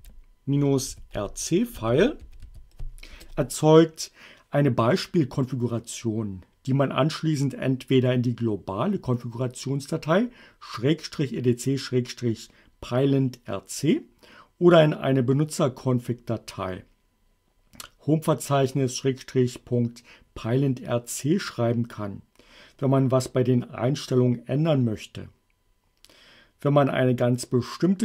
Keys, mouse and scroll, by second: 0.0-3.0 typing, 3.2 Return.